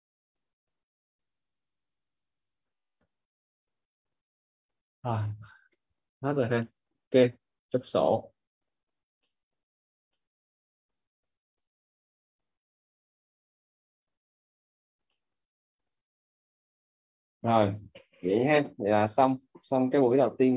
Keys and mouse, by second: 6.4 middle click, 9.1 middle click, 15.0 middle click, 17.2 click.